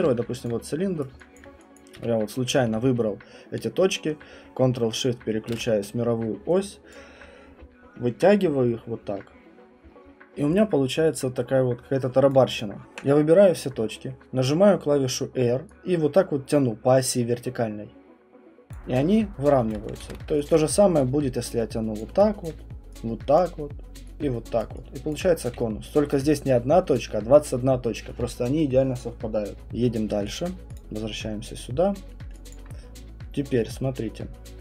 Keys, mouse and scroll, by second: 0.0 f, 0.4 alt+click, 1.0 right click, 1.4 alt+click, 1.8 click, 2.0 w, 6.9 click, 12.3 click, 12.6 click, 18.7 click, 19.7 click, 20.0 ctrl+z, 20.5 alt+click, 22.0 click, 22.4 alt+click, 23.4 click, 24.6 click, 25.1 alt+click, 25.5 q, 26.1 click, 29.5 Delete, 29.5 right click, 29.5 alt+click, 29.5-29.8 scroll, 30.1 alt+middle click, 30.4 alt+click, 30.8 click, 31.2 middle click, 32.1-34.6 alt+middle click, 32.5 alt+click, 33.6 middle click, 33.6 middle click.